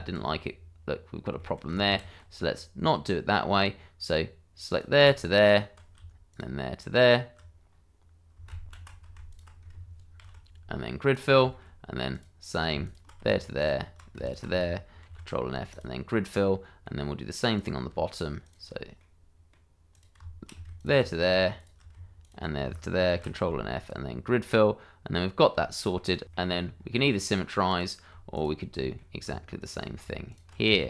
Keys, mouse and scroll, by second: 0.2-1.3 scroll up 1, 1.3 shift+middle click, 2.2 ctrl+z, 2.6-2.9 scroll down 1, 2.9 middle click, 3.7-4.7 scroll down 1, 4.7 click, 5.4 ctrl+click, 6.3 shift+click, 8.5 ctrl+z, 9.3 ctrl+click, 10.2 ctrl+f, 11.1 click, 11.5 shift+middle click, 12.1 click, 12.8 ctrl+click, 13.6 shift+click, 14.2 ctrl+click, 15.2 ctrl+f, 15.7 click, 16.1-16.4 scroll down 1, 16.4 middle click, 17.5 click, 18.4 shift+click, 19.0 middle click, 19.9 click, 20.8 ctrl+click, 22.2 ctrl+click, 23.1 ctrl+f, 23.8 click, 24.3 scroll down 1, 24.6 middle click, 25.6 shift+middle click, 25.9 middle click, 26.2 ctrl+z, 26.7-27.7 scroll up 1, 27.7 click, 28.3 ctrl+click, 28.8 shift+middle click, 29.6 shift+click, 30.4 ctrl+click.